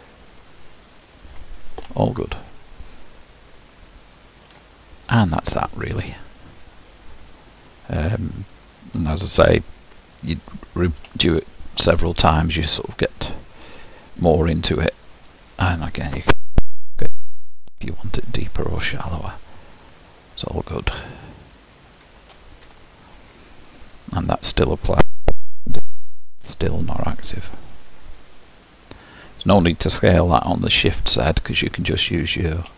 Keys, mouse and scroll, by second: 2.1 Tab, 4.0-5.2 scroll down 2, 8.3-10.5 middle drag, 10.5 click, 11.2-15.5 shift+middle drag, 15.5 click, 16.6 s, 24.3 click, 25.3 s.